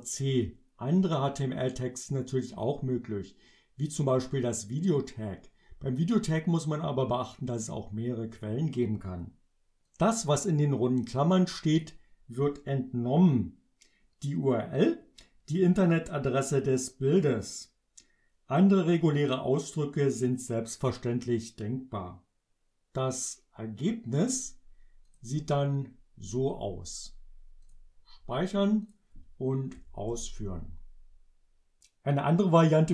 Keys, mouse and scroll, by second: 9.9-12.0 drag, 25.1 click, 27.7 click, 28.9 click, 29.8 Up, 30.2 Return.